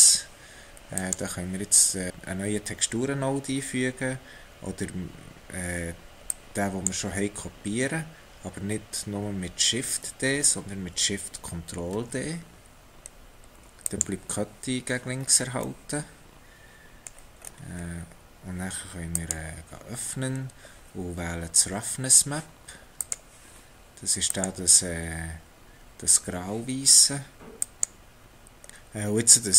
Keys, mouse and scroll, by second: 0.4 click, 6.3 click, 12.1 ctrl+shift+d, 15.2-16.1 scroll down 4, 16.1 middle click, 17.4-17.9 scroll up 6, 19.2 click, 29.1 scroll up 2.